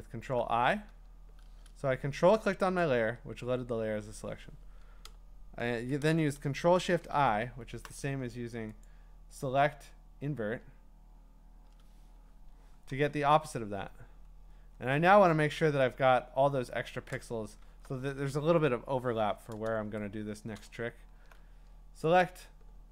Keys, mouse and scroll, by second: 1.2 scroll, 2.8 ctrl+click, 6.8 ctrl+shift+i, 8.9 click, 12.5 Escape, 13.2-14.3 alt+scroll up 11, 14.3-16.2 scroll, 16.8 scroll down 10, 17.6-18.3 scroll down 2, 20.1 scroll, 20.6 click, 20.9 scroll, 22.3 click.